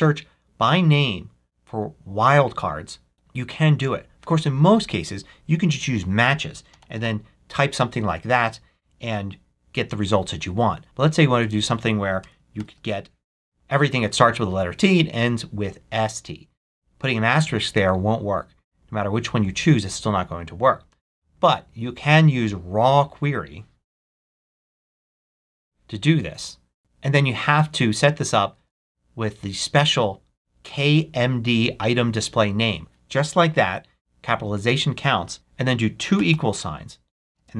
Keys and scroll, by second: 6.4-7.5 typing, 11.3 Left, 12.1 BackSpace, 12.5 shift+8, 23.7-24.9 typing, 28.5 super+v, 35.3 BackSpace, 36.1 =, 37.3-37.5 typing.